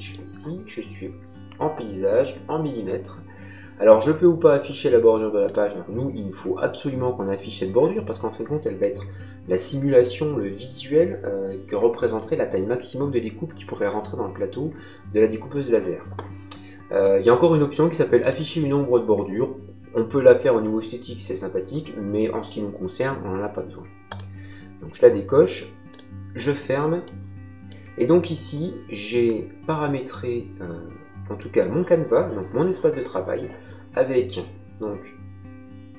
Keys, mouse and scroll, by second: 3.9 click, 5.4 click, 18.1 click, 24.0 click, 25.9 click, 27.0 middle click, 30.1 ctrl+middle click.